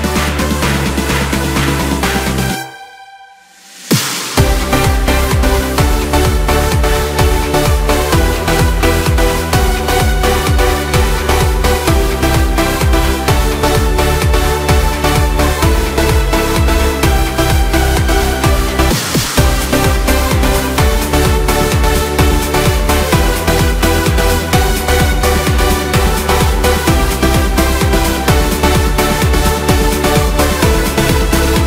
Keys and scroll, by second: 19.8 Return, 21.2 ctrl+shift+n, 21.6 Return.